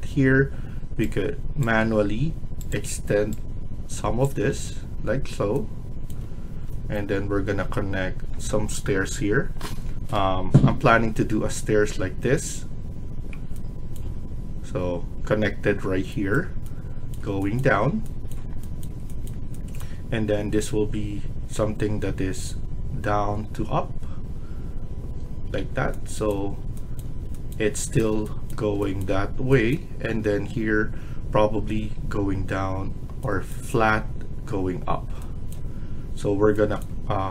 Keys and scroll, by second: 1.8 Escape, 4.4 Escape.